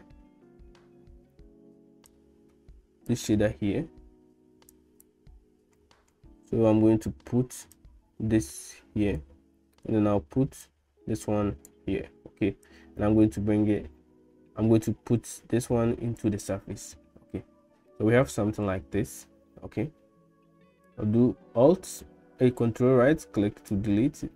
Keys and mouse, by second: 2.2-3.2 drag, 4.9 click, 7.8-9.2 drag, 10.6-11.7 drag, 12.6-16.3 drag, 17.9 middle click, 20.9-23.8 ctrl+drag.